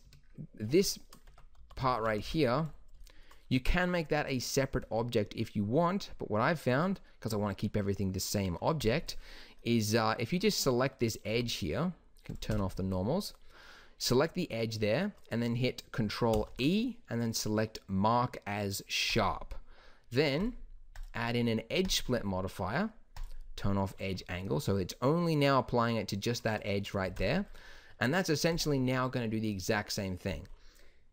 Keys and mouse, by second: 0.0 Escape, 1.2 Tab, 1.5 a, 1.7 a, 1.9 a, 2.1 b, 6.6-8.7 middle drag, 8.7-9.8 drag, 11.2 n, 12.4 n, 16.2 ctrl+e, 20.4-24.1 drag, 24.1 Tab, 27.0 ctrl+s.